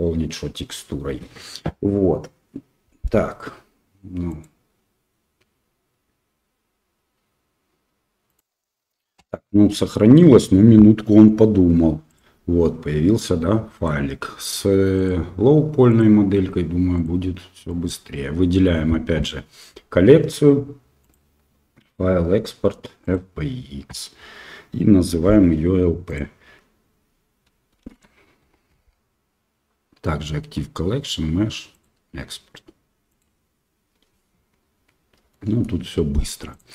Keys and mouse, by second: 9.7 middle click, 15.0 click, 16.9 click, 17.7 click, 21.1-23.2 drag, 35.3 middle click.